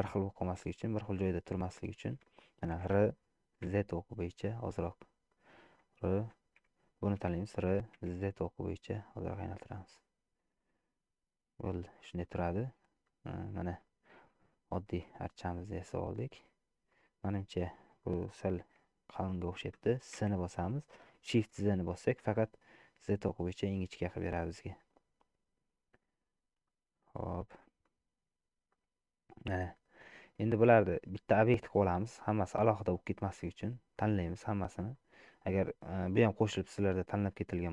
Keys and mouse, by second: 2.8 r, 6.6 r, 11.1-12.2 middle drag, 13.1 middle click, 14.5 shift+middle click, 15.5 middle click, 20.2 s, 26.7 middle click, 28.8-30.0 middle drag, 30.5 shift+middle click, 31.0 middle click, 32.2 click, 34.0 middle click, 35.0 middle click, 36.4-37.5 drag.